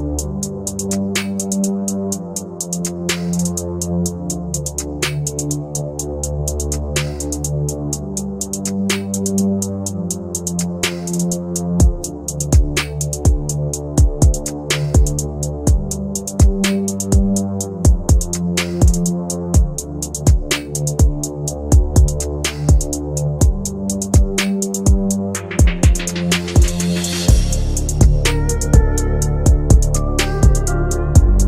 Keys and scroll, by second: 9.1 Delete, 11.0 shift+F2.